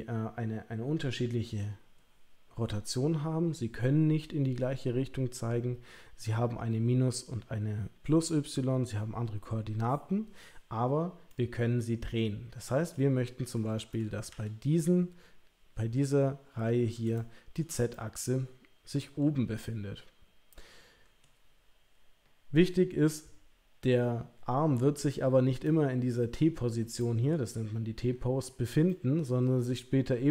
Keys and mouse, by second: 11.3-12.9 middle drag, 14.3 l, 17.2 shift+middle click, 17.9-21.2 middle drag, 25.7 middle click, 27.0 middle click, 28.9 middle click.